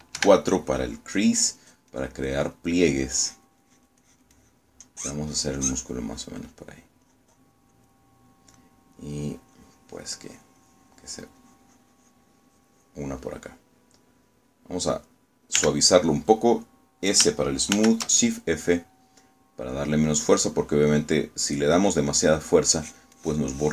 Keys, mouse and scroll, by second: 1.3 4, 2.7-7.5 drag, 8.1-9.1 drag, 9.7 middle click, 10.6-12.5 drag, 14.3 middle click, 16.7 s, 18.9 shift+f, 22.6 click, 23.2 middle click.